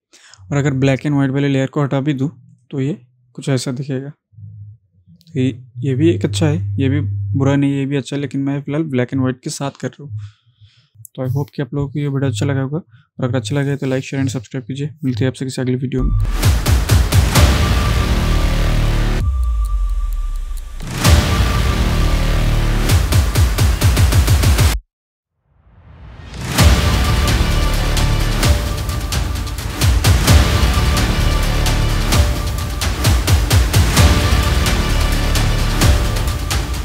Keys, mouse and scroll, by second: 9.9 click.